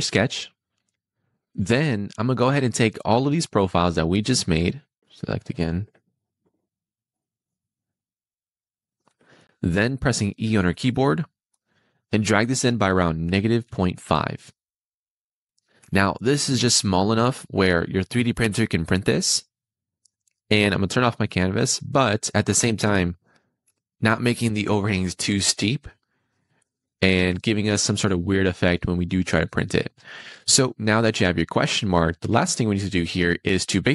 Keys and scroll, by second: 10.3 e, 13.4 -, 13.7 ., 14.1 5, 15.7 Return.